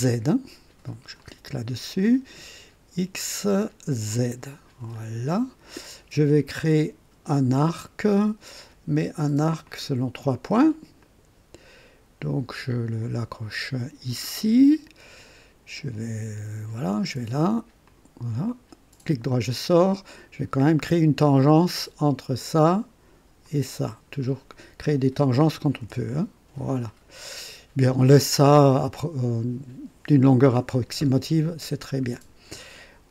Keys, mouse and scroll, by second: 1.2 click, 4.1 click, 4.9 click, 9.6 click, 11.0 click, 14.2 click, 16.7 click, 17.9 click, 18.5 right click, 21.2 click, 23.4 click, 25.8 t, 26.9 right click.